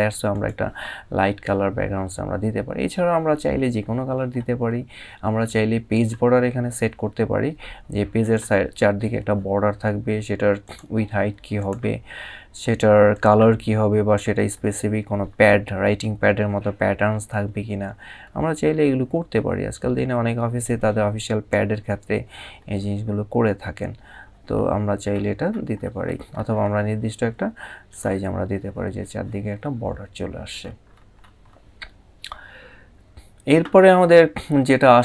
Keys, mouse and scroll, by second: 0.0 click, 1.5 scroll down 1, 2.0 scroll down 1, 2.6-3.0 scroll up 1, 5.6 click, 9.2 click, 10.3 click, 12.8 click, 20.3 click, 27.6 click, 29.2 scroll down 1, 30.3 scroll up 1.